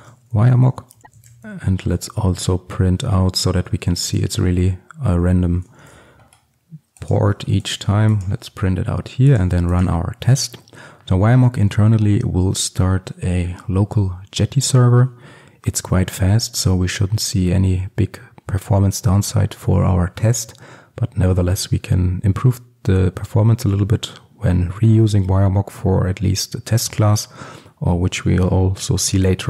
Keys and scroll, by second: 1.0 alt+Return, 2.1 Return, 5.9 ctrl+alt+super+l, 7.3 ctrl+x.